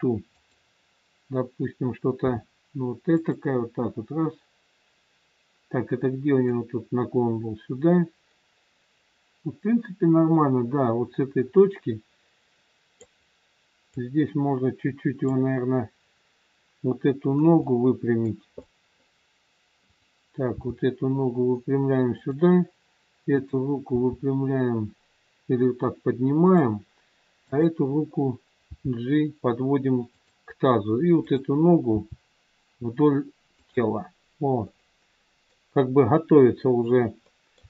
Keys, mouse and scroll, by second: 2.2 r, 6.4 click, 13.9 click, 17.6 middle click, 19.8 middle click, 19.8 click, 20.6 g, 23.3 click, 24.2 g, 27.4 click, 28.7 g, 31.2 click, 32.0 g, 34.5 middle click, 36.5-37.3 scroll up 2, 37.3 middle click.